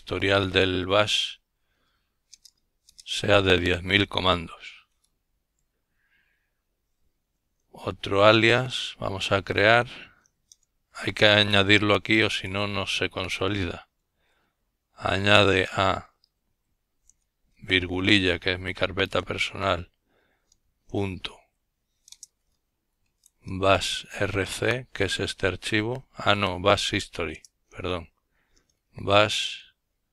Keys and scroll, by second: 0.2-0.8 typing, 6.1 typing, 8.2-11.7 typing, 13.1 typing, 14.9 typing, 16.9 typing, 18.3-22.3 typing, 24.7 typing, 26.3-30.1 typing.